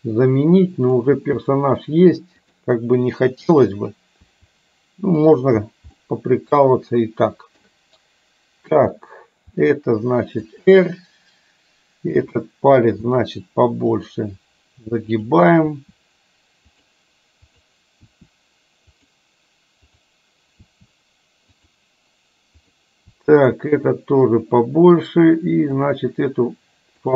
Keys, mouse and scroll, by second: 0.8 middle click, 1.3 r, 3.7 click, 5.9-7.7 middle drag, 8.8 click, 9.6 r, 12.3 click, 13.1 r, 15.2 click, 15.7 r, 18.2 r, 20.1 click, 20.7 r, 23.2 r, 25.8 click.